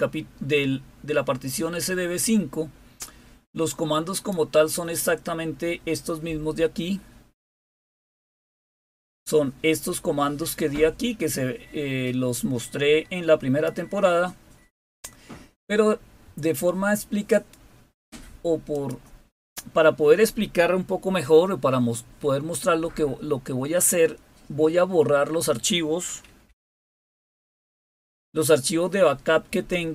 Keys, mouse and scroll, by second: 4.0 click, 7.5-9.2 scroll up 3, 10.5-13.6 drag, 17.2 click, 18.6 click, 26.8-27.6 typing.